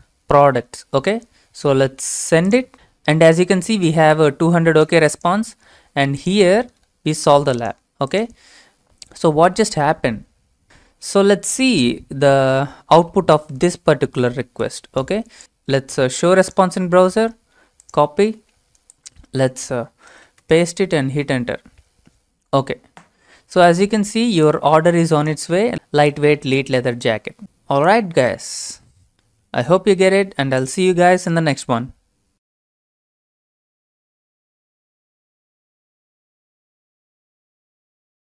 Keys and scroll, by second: 9.7 alt+Tab, 13.6 alt+Tab, 20.1 ctrl+v, 20.4 Return.